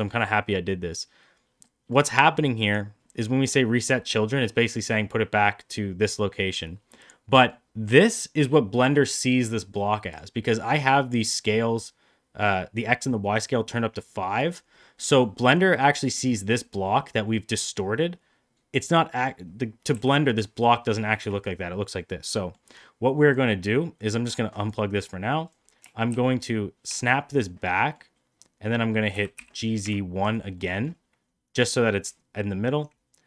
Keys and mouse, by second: 1.5 middle click, 2.5 click, 3.1 middle click, 3.7 middle drag, 4.6 middle click, 6.8-7.4 middle drag, 9.3 middle click, 14.9 middle click, 19.0 click, 19.8 g, 22.2 middle drag, 24.2-24.6 drag, 25.3 click, 26.0 shift+s, 27.3-27.8 middle drag, 29.0 g, 30.4 middle drag, 31.5 middle click.